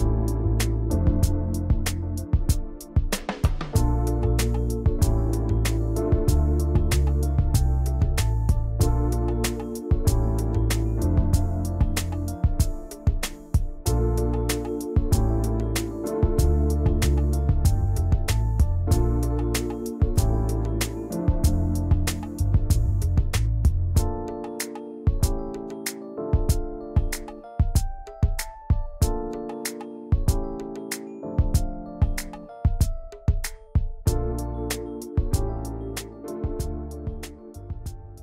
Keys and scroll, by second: 7.0 g, 7.4 v, 8.3 g, 11.4 v, 23.2-24.1 typing, 24.5 Return.